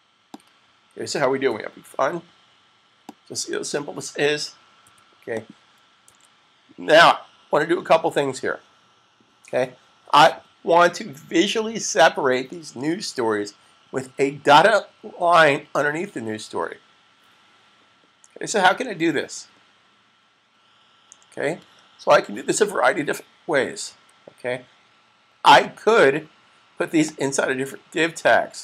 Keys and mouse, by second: 0.1 click, 1.0-1.7 typing, 1.2 click, 3.0 click, 4.5-5.2 typing, 4.7 click, 5.2 click, 6.0 super+s, 23.7 super+s, 27.0 click.